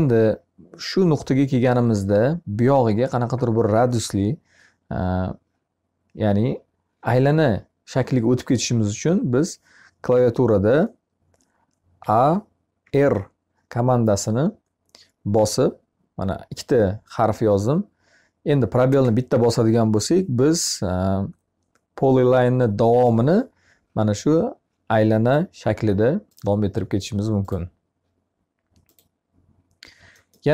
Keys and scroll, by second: 11.4 a.